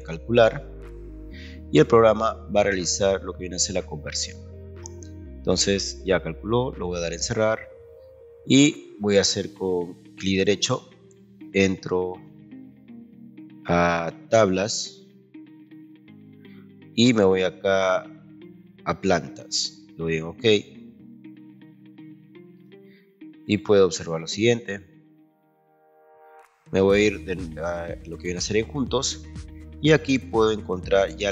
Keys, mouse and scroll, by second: 0.4 click, 7.1 click, 10.3 right click, 15.7 click, 18.4 click, 19.9 click, 28.3 click.